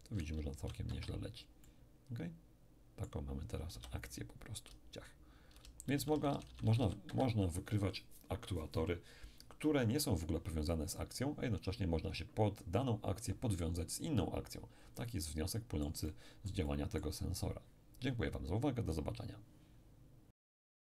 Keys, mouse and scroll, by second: 0.9 Escape, 1.6-3.7 drag, 3.7 middle click, 3.7 p, 4.7 d, 4.9 d, 7.0 Escape, 15.2-17.9 middle drag.